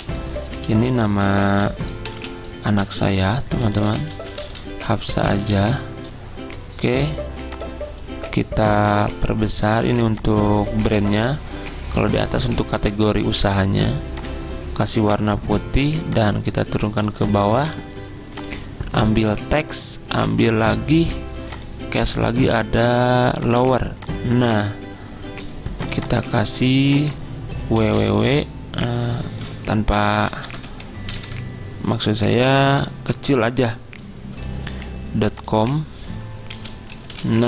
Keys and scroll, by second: 0.0 typing, 1.6 BackSpace, 1.7 BackSpace, 1.9 BackSpace, 2.2 Caps_Lock, 3.8-6.2 typing, 27.9-28.3 typing, 30.1-32.6 typing, 30.7 Caps_Lock, 34.6 ., 35.7-37.4 typing.